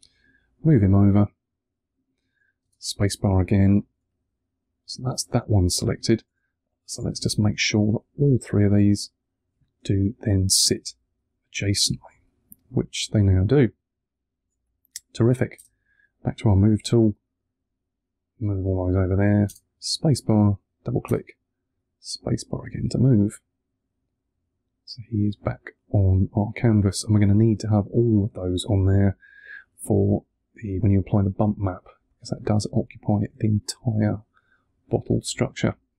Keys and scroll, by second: 2.5 space, 3.8 3, 5.7 2, 9.7 3, 15.4 space, 19.3 space, 20.9 space.